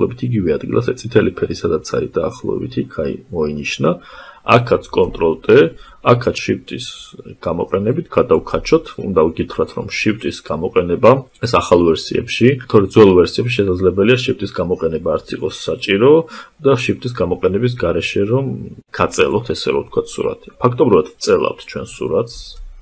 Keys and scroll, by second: 3.8 ctrl+t.